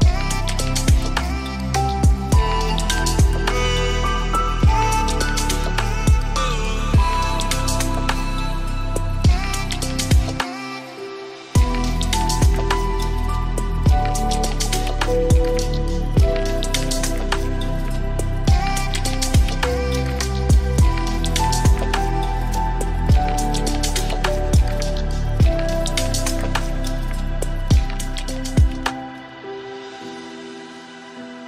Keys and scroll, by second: 22.2 ctrl+space.